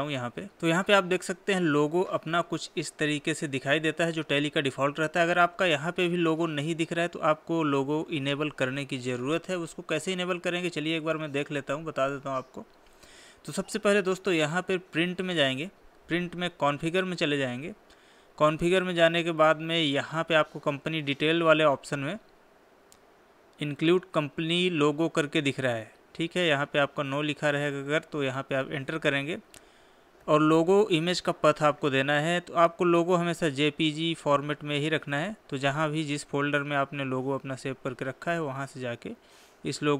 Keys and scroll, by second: 9.3 Escape, 9.7 Escape.